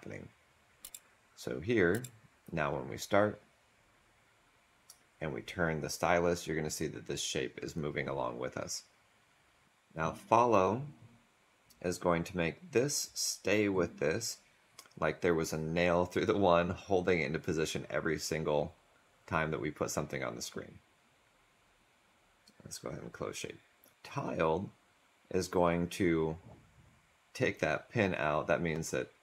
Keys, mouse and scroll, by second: 0.8 ctrl+z, 1.8 ctrl+z.